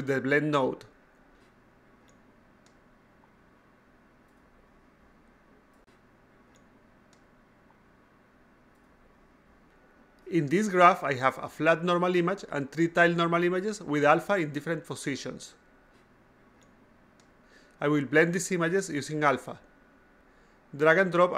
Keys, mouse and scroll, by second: 0.2-6.0 drag, 6.6 a, 6.8 click, 8.9 click, 9.3 click, 12.1 click, 14.3 click, 14.5 click, 16.5 click, 16.7 click, 17.5 click, 17.7 click, 18.5 click, 18.7 click.